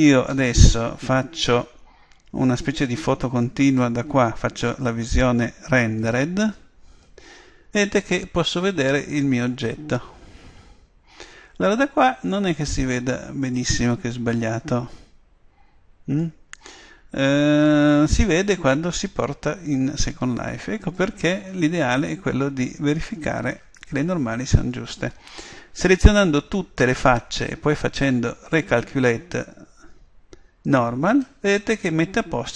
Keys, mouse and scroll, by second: 3.6 click, 8.8-10.0 middle drag, 17.7 click, 22.8 middle click, 26.0 a, 26.4 a, 30.6 click.